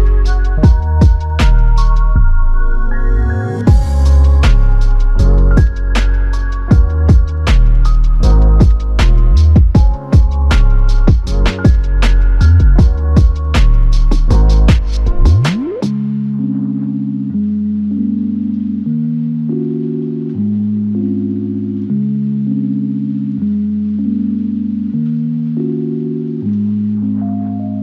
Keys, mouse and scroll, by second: 1.6 alt+click, 9.4 alt+click, 25.6-27.4 ctrl+drag.